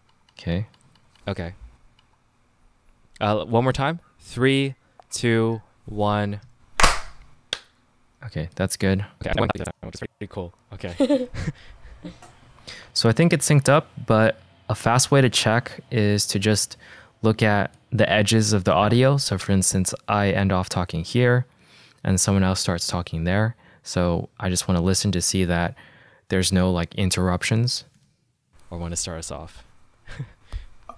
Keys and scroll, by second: 0.6 -, 8.6 space, 11.5 -, 12.9 space, 14.0 -, 28.5 space.